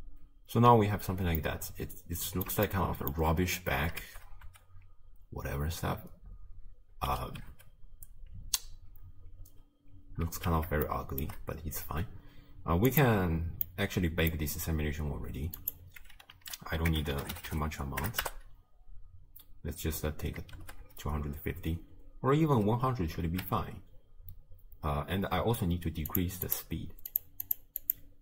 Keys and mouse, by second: 1.2 space, 1.4-2.5 drag, 2.7-3.2 shift+drag, 4.1 shift+space, 7.0 space, 7.5 space, 9.5 space, 10.3 shift+space, 11.0-11.3 shift+middle drag, 13.0 click, 13.8 click, 15.6-18.3 drag, 17.5 0, 20.6 shift+space, 22.7 space, 23.3 shift+space, 26.2 drag, 26.5 click, 27.2 drag, 27.6 click.